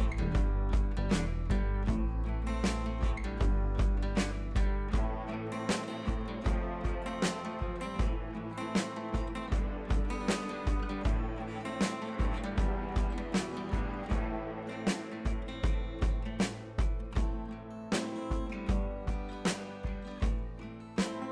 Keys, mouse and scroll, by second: 0.1-1.9 alt+drag, 3.0 scroll up 1, 3.5 click, 3.7 ctrl+scroll down 1, 3.8 ctrl+t, 4.7 click, 6.3 scroll up 1, 7.0 shift+click, 7.8 ctrl+a, 8.4 click, 9.1 ctrl+z, 9.3 click, 11.3 ctrl+d, 12.1 click, 12.7 ctrl+a, 13.6 click, 14.2 ctrl+d, 14.3-14.7 scroll down 1, 14.9 click, 15.3-16.0 scroll up 1, 16.0 click, 16.5 Up.